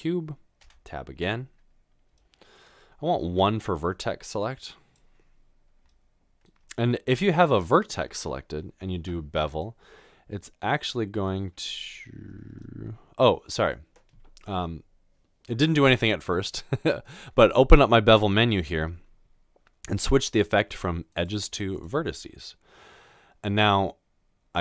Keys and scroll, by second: 0.7 Tab, 3.2 Tab.